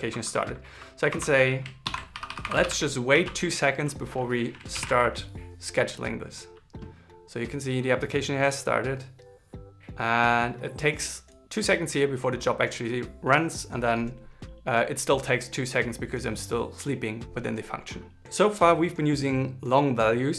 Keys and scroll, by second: 1.5 shift+-, 2.3 shift+l, 2.8 super+s, 4.5 ctrl+shift+r.